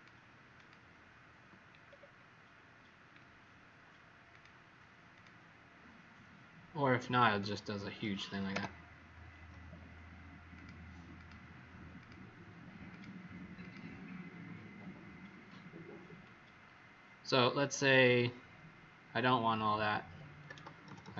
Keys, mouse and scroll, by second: 0.5 click, 1.8-2.4 alt+scroll down 3, 4.2 click, 8.5 Delete, 10.5 click, 11.1 click, 11.9 click, 20.6 ctrl+z, 20.8 ctrl+z, 21.0 ctrl+z, 21.1 ctrl+z.